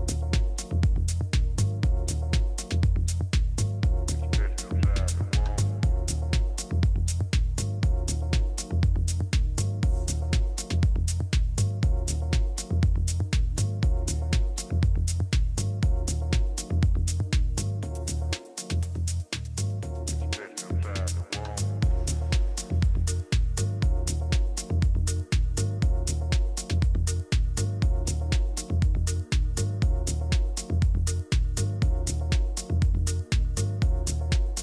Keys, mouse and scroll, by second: 0.8 b, 2.2 g, 7.2 a, 10.3 ctrl+r, 15.8 a, 16.7 z, 19.7-21.6 middle drag, 24.8 ctrl+z, 25.3 ctrl+z, 25.7 ctrl+z, 26.1 ctrl+z, 26.4 ctrl+z, 27.4 ctrl+z, 28.1-29.3 middle drag, 32.4 ctrl+z, 32.8 ctrl+z, 33.2 ctrl+z, 33.7 ctrl+z, 34.5 ctrl+z.